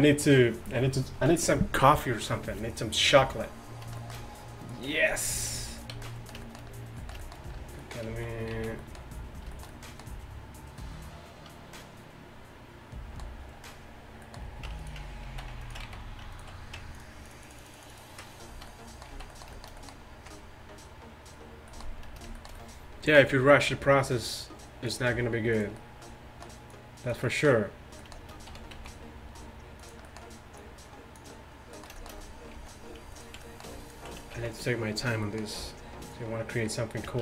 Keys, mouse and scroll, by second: 4.9 Tab, 5.6 z, 6.0 z, 8.1 z, 8.6 z, 14.7 Tab, 15.1 Tab, 15.4 z, 15.9 z, 18.5 z, 19.2 z, 23.7 r, 25.2 g, 26.8-28.3 middle drag, 28.3 click, 28.6 r, 30.6-32.1 drag, 31.8 r, 32.6 z, 33.2 middle click, 33.7-35.3 drag, 34.4 z, 35.6 g.